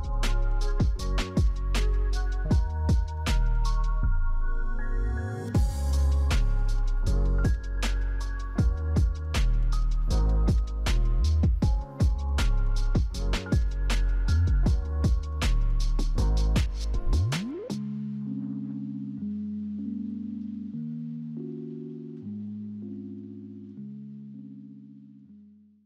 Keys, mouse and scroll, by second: 18.7 right click, 18.7 right click.